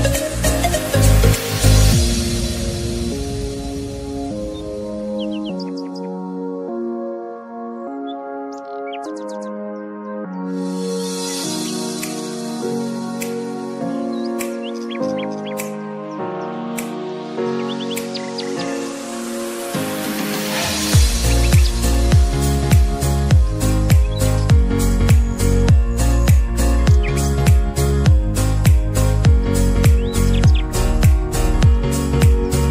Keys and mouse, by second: 0.9-15.0 drag, 15.0 ctrl+z, 20.2-29.2 drag, 31.5 Down.